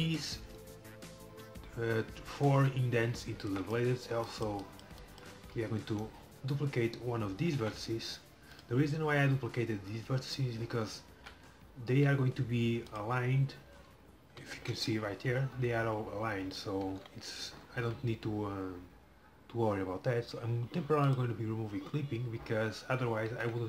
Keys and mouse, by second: 6.0-7.7 middle drag, 7.7 shift+d, 12.0 g, 14.4 KP_1, 17.0 KP_7, 21.2-22.9 drag, 23.3 g.